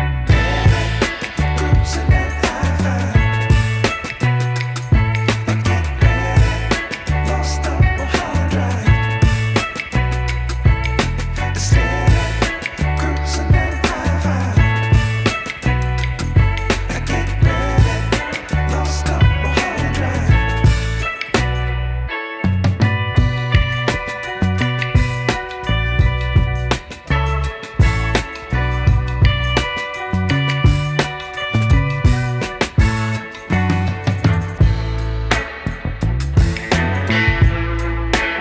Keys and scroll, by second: 22.8 KP_1, 26.7 KP_0, 29.9 KP_5, 30.2 KP_0, 34.0 KP_9, 34.1 KP_0, 37.4 KP_0.